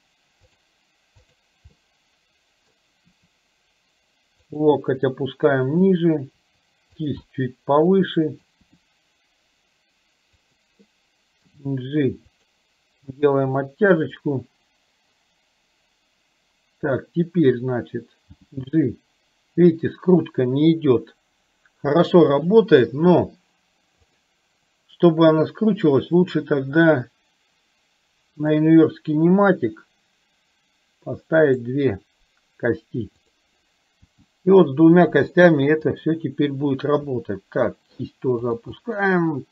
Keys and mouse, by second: 1.4 click, 1.9 middle click, 3.3 r, 5.9 click, 6.4 r, 7.3-8.5 middle drag, 8.7 r, 11.5 g, 13.8 middle click, 18.5 g, 24.0 click, 28.5 click, 31.7 click, 33.3 click, 34.3 g, 37.2 r, 38.9 middle click.